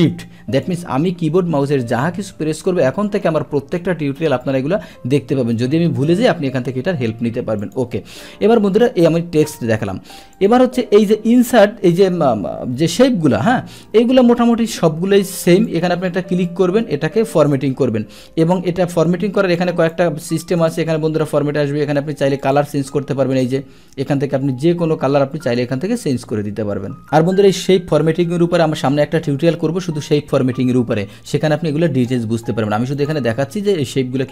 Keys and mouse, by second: 0.6 click, 7.6 click, 10.4 click, 15.5 click, 16.5 click, 19.6 click, 20.6 click, 22.4 click, 32.9 click.